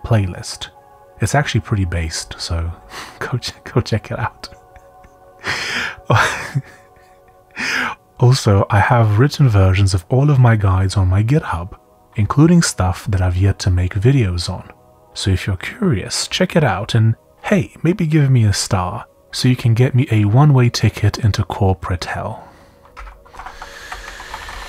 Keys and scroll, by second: 2.7 typing, 4.1 j, 15.2 j, 18.9 typing, 22.3-22.9 typing, 23.3 Return, 23.5 Return, 23.9 Up, 24.0-24.6 typing.